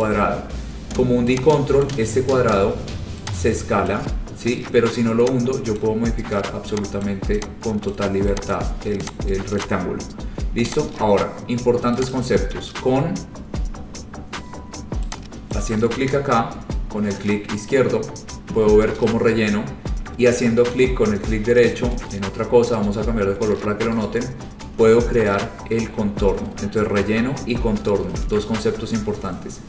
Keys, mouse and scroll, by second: 0.2 click, 2.0 ctrl+click, 2.0 ctrl+right click, 4.1 ctrl+click, 5.9 click, 7.2 click, 8.0 click, 8.7 click, 9.3 click, 9.7 click, 10.1 scroll, 10.9 click, 12.3 click, 15.8 click, 19.5-20.7 drag, 24.2 right click, 25.4-26.9 scroll.